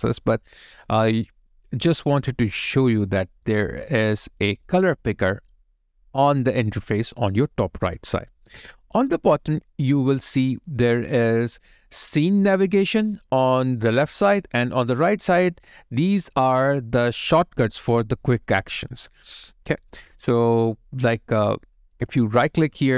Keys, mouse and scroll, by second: 2.8 alt+right click, 3.7 alt+middle click, 22.7 right click.